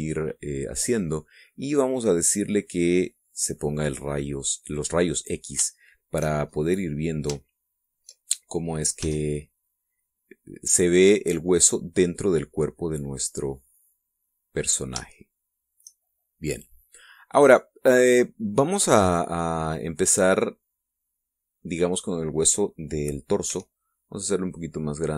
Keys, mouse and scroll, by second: 1.4 click, 3.9 click, 4.7-7.0 middle drag, 7.0 shift+scroll up 1, 7.5-7.8 scroll down 2, 8.0 shift+middle click, 9.6 s, 11.3 click, 12.2-14.0 drag, 14.0 middle click, 15.2-15.6 scroll up 1, 15.8 shift+middle click, 19.1-22.4 middle drag, 24.1 s.